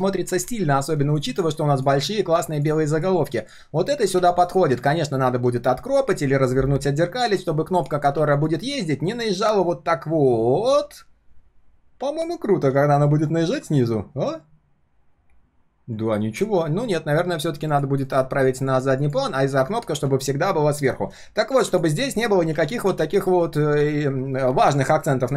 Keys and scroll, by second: 16.2 ctrl+z, 18.0 ctrl+shift+[, 22.5 ctrl+z, 22.8 ctrl+z, 23.2 ctrl+z.